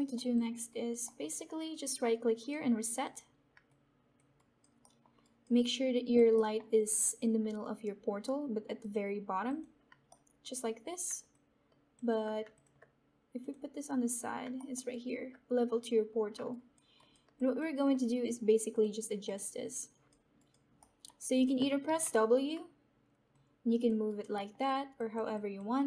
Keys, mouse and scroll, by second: 0.2 alt+click, 0.6 alt+right click, 1.0 alt+middle click, 3.0 right click, 3.0 click, 3.6 alt+click, 4.3 alt+right click, 4.9 alt+middle click, 5.2 alt+right click, 5.8 alt+click, 6.3 alt+middle click, 7.0 alt+click, 10.0 alt+middle click, 10.3 alt+middle click, 11.2-12.5 alt+drag, 13.3 click, 14.5 alt+middle click, 14.8 alt+right click, 17.6 alt+click, 18.7 click, 19.8 right click, 21.5 alt+right click, 21.8 w, 23.2 click, 24.0 right click, 24.5 alt+middle click, 24.9 click.